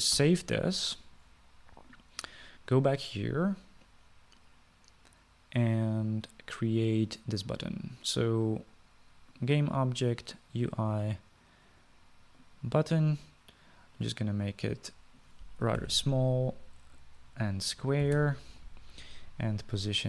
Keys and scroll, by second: 1.3 ctrl+s, 16.6-17.5 typing, 18.7-19.8 typing.